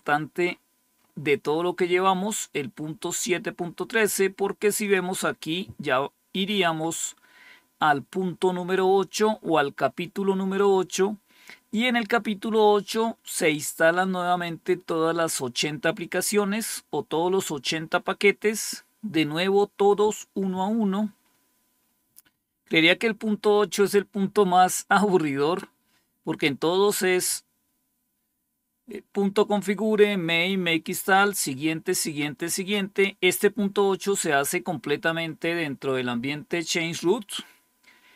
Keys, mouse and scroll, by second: 4.7 click, 15.9-17.3 scroll down 1, 17.3-17.9 scroll down 1, 17.9-18.7 scroll down 1, 18.7-19.8 scroll down 1, 19.8-21.2 scroll down 1, 21.2-30.9 scroll up 1.